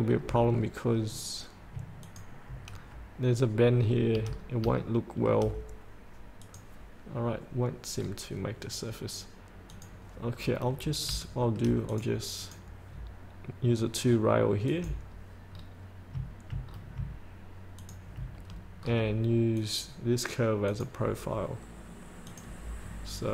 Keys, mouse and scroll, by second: 0.7-1.9 scroll down 1, 2.2 ctrl+click, 2.9-4.3 scroll up 1, 4.4 scroll up 1, 5.0 shift+middle click, 6.6 click, 8.2-9.9 scroll down 1, 9.9 click, 10.6 scroll up 1, 11.4 shift+middle click, 12.0-13.7 drag, 15.7-16.4 scroll down 1, 16.9 scroll down 1, 18.0 ctrl+click, 18.7-19.0 scroll up 1, 19.8 click, 23.0 scroll up 1.